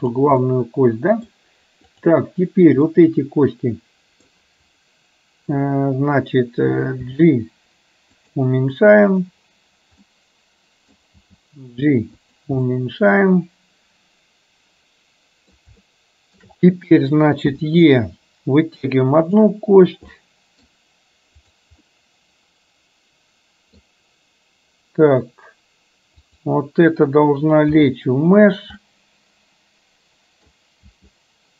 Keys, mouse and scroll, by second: 0.5 middle click, 1.9 click, 3.0-4.4 middle drag, 9.2 click, 10.2 middle click, 12.8-15.7 middle drag, 15.9 shift+middle click, 17.5 e, 20.2 middle click, 22.2-23.8 middle drag, 26.4 click, 28.9-30.5 middle drag, 30.9 g.